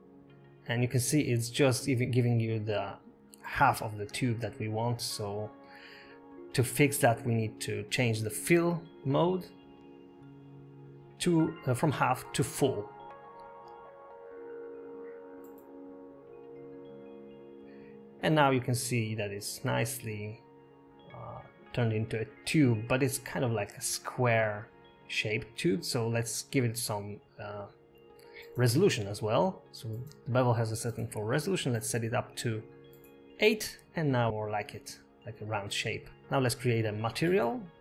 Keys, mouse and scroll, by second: 0.1 click, 7.2 click, 12.3-13.9 scroll up 2, 13.9 click, 18.8 middle click, 19.1-20.0 scroll up 6, 20.2 shift+middle click, 21.1 scroll down 2, 21.7 middle click, 22.1 scroll up 1, 22.9 middle click, 24.0 shift+middle click, 26.9-27.6 scroll down 4, 30.0 click, 33.6 shift+middle click, 34.0 scroll up 1, 35.8 shift+middle click, 35.8 click, 35.8 scroll down 1, 36.4 click, 37.1 click.